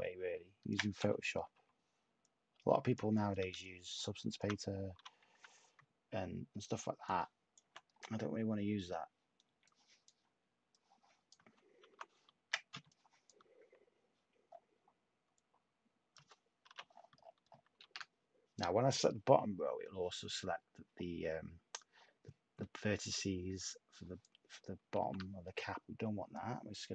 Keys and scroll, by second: 0.9 /, 4.9-5.3 typing, 12.7 t, 16.6 u, 17.8 shift+a, 24.9 a, 26.8 h.